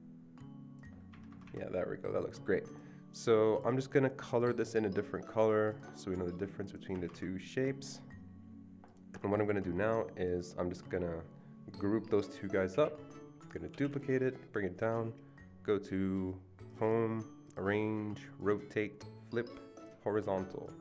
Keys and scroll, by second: 1.1 Escape, 1.3 Escape, 1.5 Escape, 6.9 Escape, 7.1 Escape, 12.7 ctrl+g, 14.2 ctrl+d.